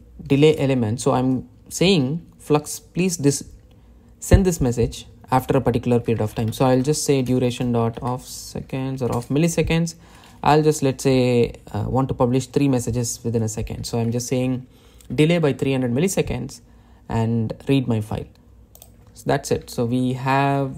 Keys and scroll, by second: 1.3 Return, 8.1 Return, 9.9 Return, 15.2 Delete, 20.4 Delete.